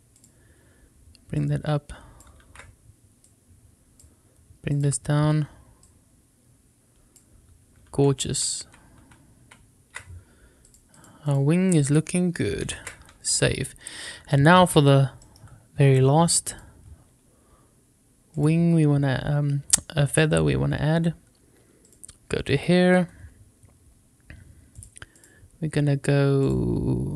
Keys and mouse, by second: 1.3 click, 2.5 ctrl+z, 3.2 click, 4.7 click, 5.8-7.1 drag, 8.3 ctrl+z, 8.6 ctrl+z, 9.0 ctrl+z, 9.4 ctrl+z, 10.6 click, 11.2 click, 12.8 ctrl+s, 15.2 shift+middle click, 16.5 click, 18.3 click, 20.0 click, 21.8 click, 24.7 click, 26.5-27.1 drag.